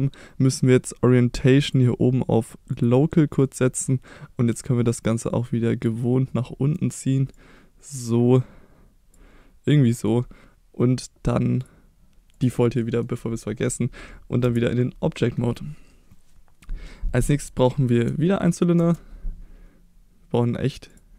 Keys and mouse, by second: 1.6-2.9 drag, 3.4 middle drag, 4.6-5.9 drag, 6.0-6.8 middle drag, 7.4-9.1 drag, 9.9 middle drag, 11.7 click, 12.8 middle click, 14.4 Tab, 14.8-15.2 middle drag, 17.4 middle click, 18.8 shift+a.